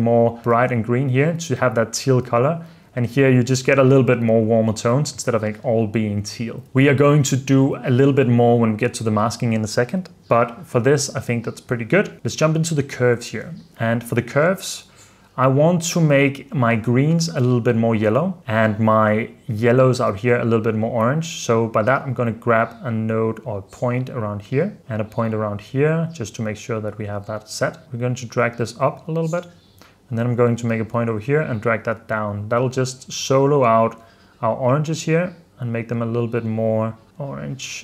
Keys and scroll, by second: 0.6 super+d, 5.3 super+f, 6.6 super+s.